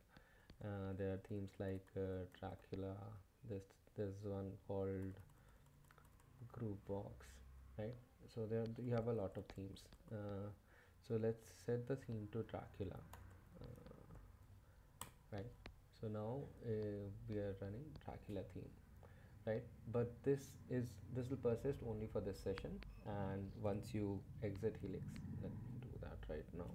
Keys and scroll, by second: 0.4-3.1 typing, 4.4-7.1 typing, 8.6-14.3 typing, 15.0 Return, 16.3 ⟲, 16.5 ctrl+Up, 17.4 Page_Up, 17.6 Page_Up, 17.8 Page_Down, 20.1 Up, 20.6 Down, 24.8 shift+;, 26.2-26.7 typing.